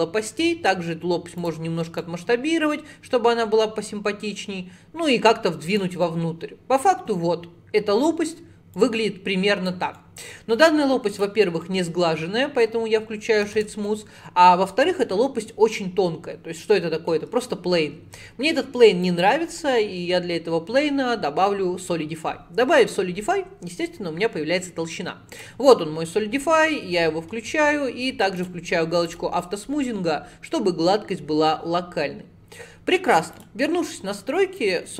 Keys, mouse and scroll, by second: 0.5 s, 2.0 click, 6.1-8.8 middle drag, 8.8 click, 10.0 middle click, 10.6-11.7 right drag, 11.7 middle click, 12.3 scroll down 1, 12.5-13.6 scroll up 1, 13.6 alt+z, 13.9-18.9 middle drag, 19.1-22.3 drag, 28.4 click, 29.1 click, 29.9-33.0 middle drag, 33.4 click, 34.6-34.9 drag.